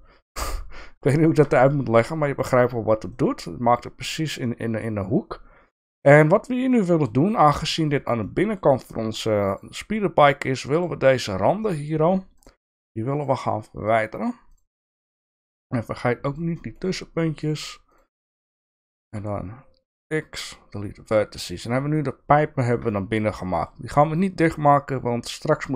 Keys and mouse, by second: 1.2 shift+middle click, 1.7 click, 2.1 middle click, 3.2 middle click, 4.5 middle click, 6.1 middle click, 6.8 middle click, 8.3 middle click, 11.7 middle click, 15.3 middle click, 16.3 shift+click, 16.6 shift+middle click, 17.4 shift+click, 17.9 shift+click, 19.1 x, 21.1 middle click, 22.9 middle click.